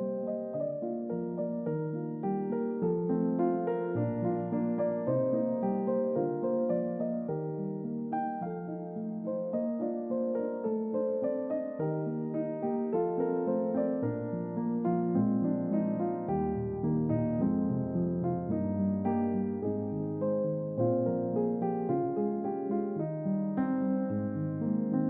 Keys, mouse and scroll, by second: 0.3 middle click, 0.9 middle click, 1.7 click, 2.7-4.6 drag, 5.4 click, 6.5-7.5 middle drag, 8.0 click, 9.3-10.0 scroll up 3, 10.8-20.9 drag, 21.2 middle click, 22.5-23.2 middle drag.